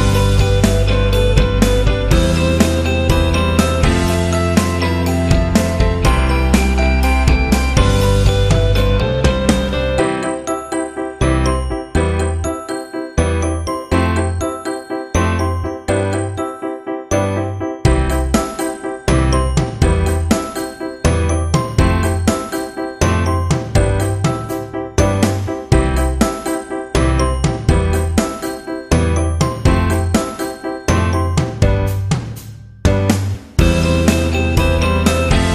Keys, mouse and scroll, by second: 11.4-23.9 drag.